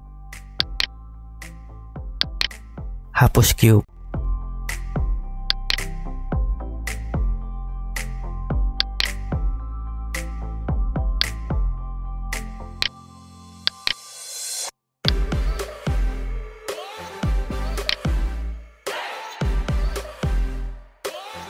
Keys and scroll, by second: 6.7 Delete, 13.2 Tab, 14.4 Tab, 18.3 Tab.